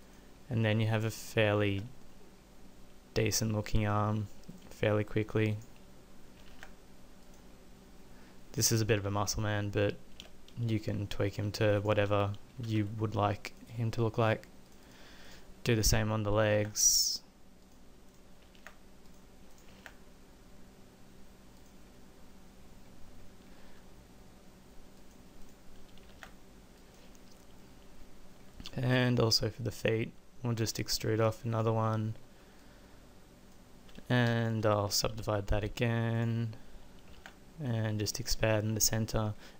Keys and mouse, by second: 1.7 z, 6.4 middle click, 6.5 ctrl+a, 7.7-9.1 middle drag, 10.2 z, 12.8 w, 16.5 ctrl+a, 18.6 ctrl+a, 19.8 ctrl+a, 23.7 g, 26.1 ctrl+a, 30.6 e, 35.1 w, 37.1 ctrl+a.